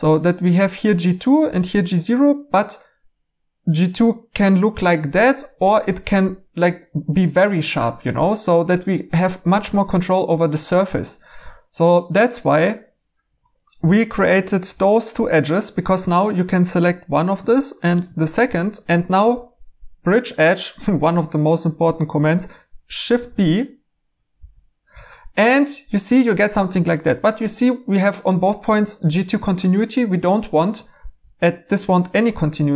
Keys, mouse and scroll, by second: 13.3 Escape, 23.1 b, 24.3 b.